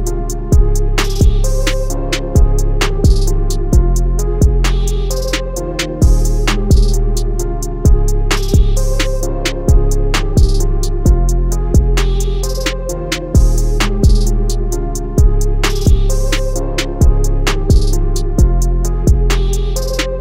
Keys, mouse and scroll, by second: 7.8 a, 8.6 click, 11.3 i, 13.9 click.